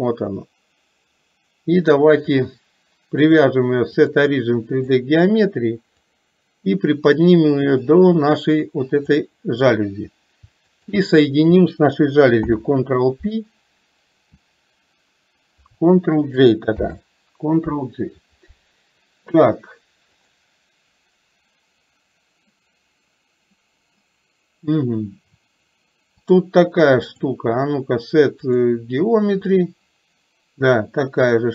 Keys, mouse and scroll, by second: 3.5-5.1 drag, 6.3-9.3 drag, 10.9 shift+click, 26.3-28.8 drag, 29.5-31.5 drag.